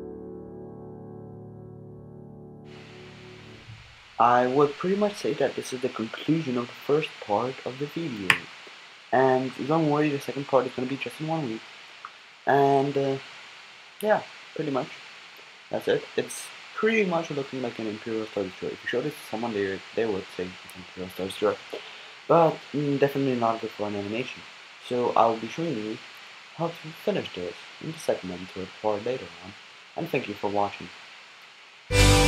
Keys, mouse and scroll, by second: 0.3 click, 0.4-2.4 typing, 0.7 click, 1.0 click, 1.7 click, 5.4-6.0 drag, 8.3 z, 9.1-10.9 middle drag, 10.9 z, 14.2-17.1 middle drag, 20.0-32.2 middle drag.